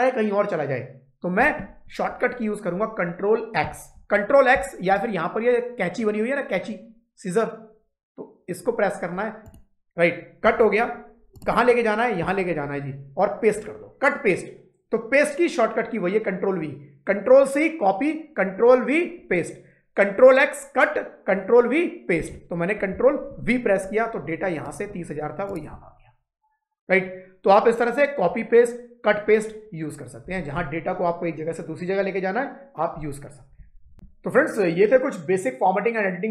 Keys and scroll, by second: 23.2 ctrl+v.